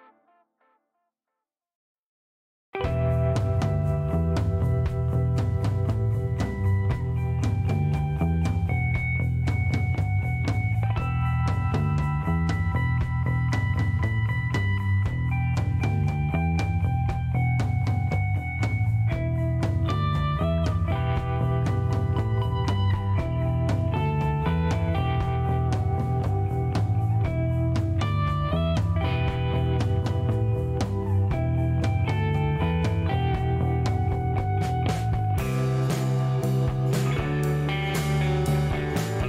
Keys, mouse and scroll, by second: 0.6 click, 2.2 click, 3.0 click, 4.4 click, 5.0 scroll up 1, 5.7 scroll up 1, 6.3 scroll up 1, 7.9 click, 8.9 shift+middle click, 9.2 shift+right click, 10.2 shift+right click, 11.1 shift+middle click, 11.6 shift+right click, 12.4 shift+middle click, 13.2 shift+right click, 14.7 click, 16.1 click, 18.1 click, 19.4-19.8 scroll up 4, 20.4-20.9 scroll down 2, 21.4-21.8 scroll up 2, 22.2-22.6 scroll up 4, 23.8 click, 24.8 shift+middle click, 25.1 shift+right click, 27.3 shift+click, 29.5 click, 30.7 middle click, 31.5 shift+right click, 34.8 click, 35.6 click, 36.3 shift+right click.